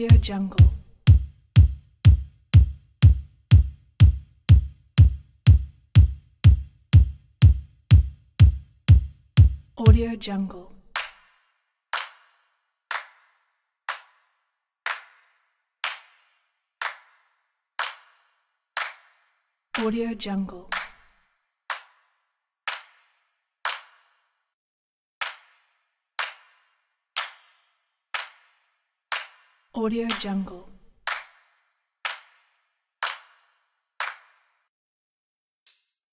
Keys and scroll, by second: 10.4 typing, 34.2-35.1 typing.